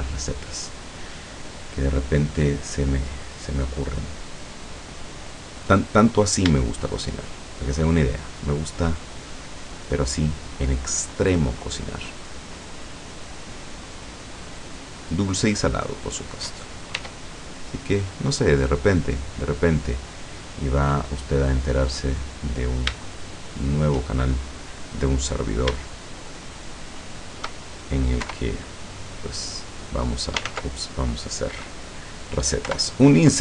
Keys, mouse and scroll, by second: 6.2 right click, 6.8 shift+right click, 7.4 shift+right click, 7.8 shift+right click, 8.4 shift+right click, 9.8 shift+right click, 10.6 shift+right click, 11.2 shift+right click, 11.6 shift+right click, 12.1 shift+right click, 12.6 shift+right click, 13.4 shift+right click, 13.9 shift+right click, 14.4 shift+right click, 14.9 shift+right click, 15.4 shift+right click, 16.0 shift+right click, 17.0 e, 19.0 click, 20.3 middle click, 21.1-22.1 scroll down 2, 22.4-24.1 middle drag, 25.5 middle click, 25.9 shift+right click, 26.3 shift+right click, 26.6 shift+right click, 27.1 shift+right click, 28.3 i, 29.6 click, 30.6 ctrl+z, 32.8 i.